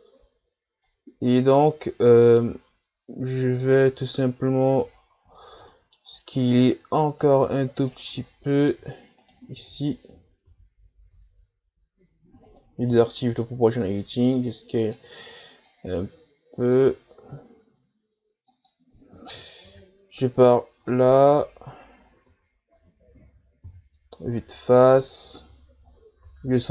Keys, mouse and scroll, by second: 0.8-3.3 middle drag, 3.3-3.9 ctrl+scroll down 5, 3.9-4.4 middle drag, 4.4-5.0 scroll up 4, 5.0-5.4 shift+scroll up 2, 5.4 ctrl+scroll down 1, 5.7 middle click, 6.1-6.4 scroll up 2, 6.5-8.2 right drag, 8.2-9.2 middle drag, 9.2-9.8 shift+right drag, 9.8 Tab, 10.1 a, 10.4 a, 11.1 s, 12.9 o, 13.9 s, 15.7-17.2 drag, 17.2 s, 19.7 KP_3, 20.6-21.3 shift+scroll up 5, 21.3-22.3 ctrl+scroll down 2, 22.3 Tab, 22.7 a, 23.7 KP_1, 25.1-25.7 ctrl+scroll up 1, 25.7-26.2 ctrl+scroll up 2, 26.2 ctrl+s.